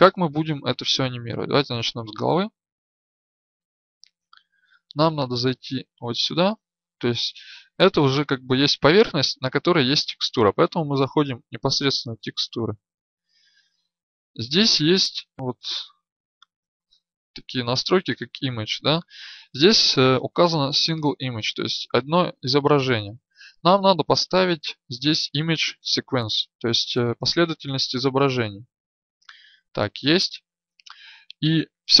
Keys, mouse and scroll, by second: 1.9-3.3 right drag, 4.4-14.5 drag.